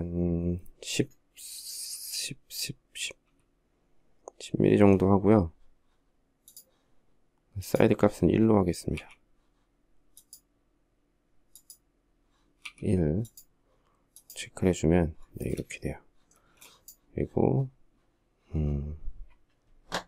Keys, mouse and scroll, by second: 8.3 1, 15.8 space.